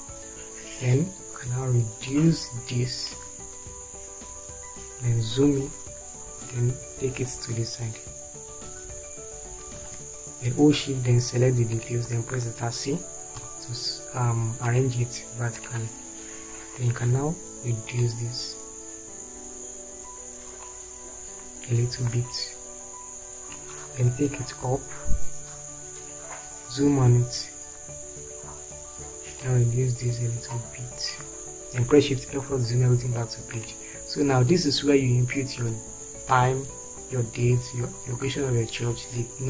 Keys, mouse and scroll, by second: 6.4 Up, 9.0 Left, 13.7 shift+c, 25.0 Up, 32.6 shift+F4.